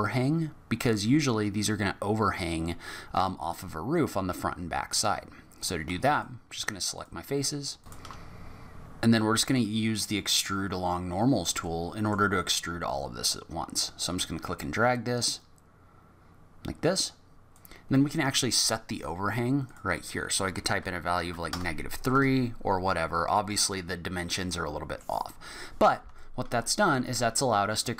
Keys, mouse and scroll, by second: 1.0 middle click, 5.5 click, 6.1 shift+click, 6.9 shift+click, 7.8 shift+click, 7.9 middle click, 8.0 scroll down 3, 8.1 scroll up 6, 8.2 shift+click, 8.3 shift+click, 8.4 shift+click, 8.4 shift+click, 8.6 shift+click, 8.6 shift+click, 8.8 middle click, 11.3 scroll down 6, 11.6 middle click, 13.8 click, 19.6 click, 23.6-24.5 scroll down 2, 24.5 middle click, 25.8 Tab, 26.2 middle click, 27.4-27.9 scroll up 1.